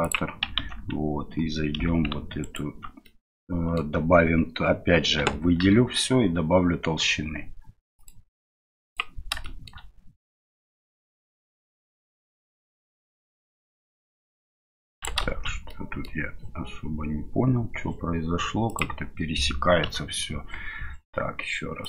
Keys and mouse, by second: 0.5 Tab, 3.1 middle click, 5.2 a, 8.0 click, 9.4-15.0 shift+middle drag, 15.4 ctrl+z, 15.4 middle click, 15.7 middle click, 18.8-19.2 drag, 19.8 KP_Divide.